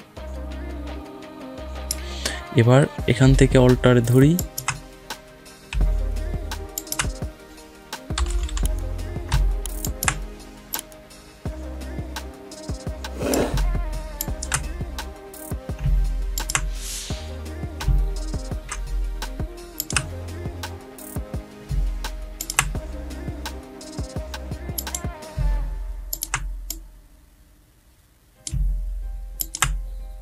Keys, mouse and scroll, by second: 4.2 alt+click, 8.0 [, 8.2 [, 8.4 [, 9.7-14.0 alt+drag, 16.2 alt+click, 19.1 alt+Num_Lock, 19.1 alt+click, 19.6 alt+click, 22.2 alt+click, 26.8 click, 28.0 click.